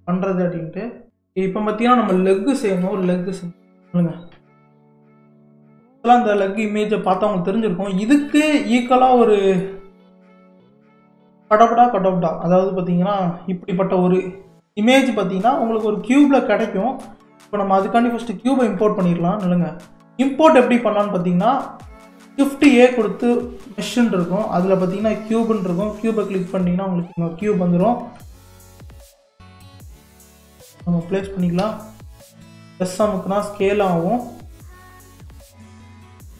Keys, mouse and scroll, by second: 1.3-1.7 scroll up 4, 1.8-2.8 scroll down 5, 2.8-4.8 middle drag, 4.8 KP_3, 5.6-6.6 scroll up 7, 6.6-7.3 shift+middle drag, 7.3-8.4 scroll up 1, 8.4-8.8 scroll down 1, 8.8-11.9 shift+middle drag, 16.7-17.0 scroll down 1, 17.0-19.9 middle drag, 19.9-20.3 scroll down 2, 20.3-21.2 middle drag, 21.2-22.1 scroll down 4, 22.1-22.6 scroll down 1, 22.6 shift+a, 29.2 KP_3, 30.4 scroll up 4, 31.6 s, 35.5 g.